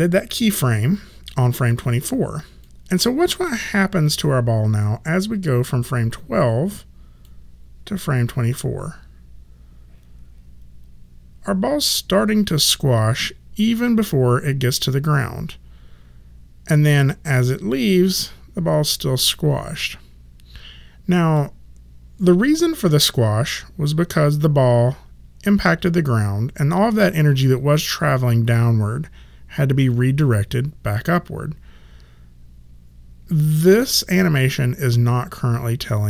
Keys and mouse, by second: 2.6 click, 7.2 click.